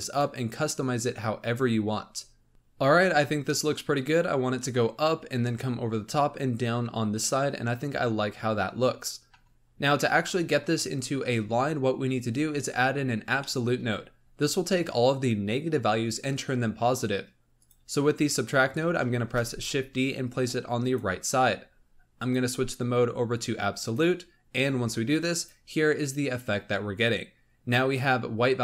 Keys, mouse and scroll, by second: 9.4-10.1 scroll down 6, 10.1-12.1 middle drag, 12.1-12.4 scroll up 2, 13.3-17.4 middle drag, 17.5 click, 19.2 shift+d, 22.1-27.7 drag, 27.7-28.6 scroll down 1.